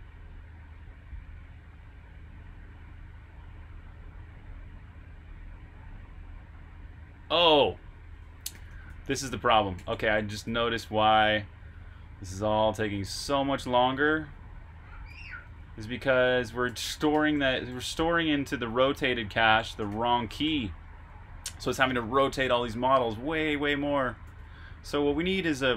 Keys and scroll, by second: 0.7-1.4 typing, 2.6 typing, 5.3-5.9 typing, 8.0-11.8 typing, 13.0-13.8 typing, 14.8-18.3 typing, 24.0-24.7 typing.